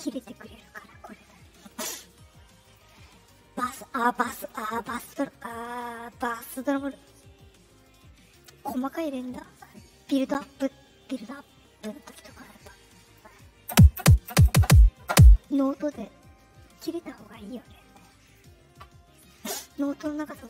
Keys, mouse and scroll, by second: 1.6 click, 2.6 click, 4.3 click, 4.8 click, 8.3 click, 9.6 click, 11.9-13.1 drag, 18.2 click.